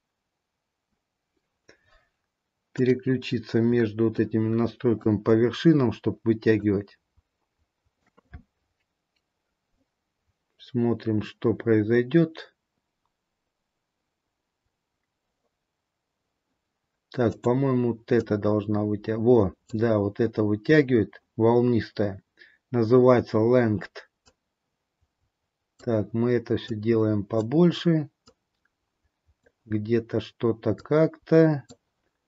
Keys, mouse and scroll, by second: 0.9-1.6 scroll up 1, 2.9 click, 2.9-3.8 scroll up 1, 4.2 shift+middle click, 6.7 click, 14.6-16.1 scroll up 2, 17.2 click, 18.4 click, 20.5-21.3 scroll down 2, 24.4 click, 26.8 click, 30.9 click.